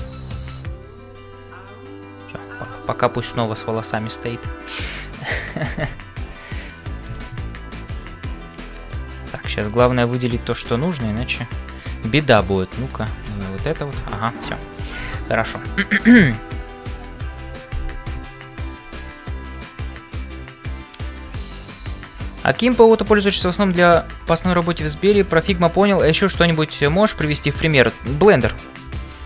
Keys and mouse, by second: 0.0-29.2 typing, 2.9 shift+middle click, 6.8 click, 7.5 click, 11.1 shift+middle click, 12.1 click, 13.6 Tab, 14.5 shift+middle click, 15.3 ctrl+s.